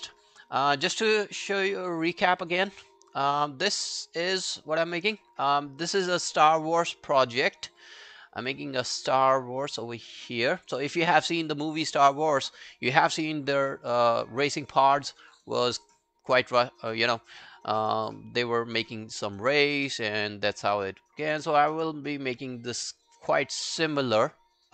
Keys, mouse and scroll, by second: 1.9 right click, 2.9 scroll down 1, 3.8 scroll down 8, 3.8 middle click, 4.1-5.0 scroll up 1, 7.7-8.1 scroll up 5.